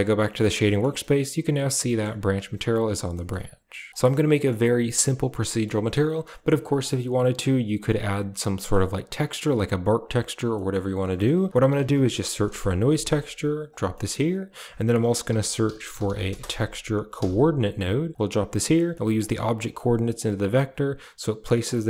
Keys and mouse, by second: 0.6 shift+middle click, 1.0 middle click, 1.7 middle click, 3.0 middle click, 4.2 middle click, 4.7 middle click, 5.0 a, 5.3 middle click, 5.9 middle click, 6.5 middle click, 8.3-8.7 middle drag, 9.1 shift+middle click, 10.4 middle drag, 11.0 shift+a, 13.8 middle click, 14.5 shift+a, 19.1-19.7 drag, 20.0 click, 21.5 click.